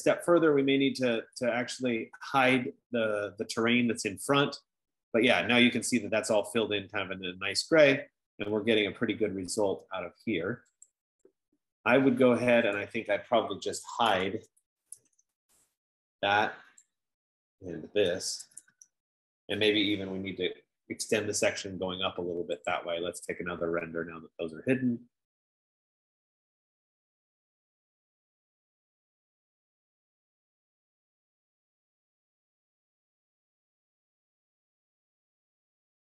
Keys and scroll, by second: 14.7-15.9 typing, 17.6-21.2 typing, 27.3 F15.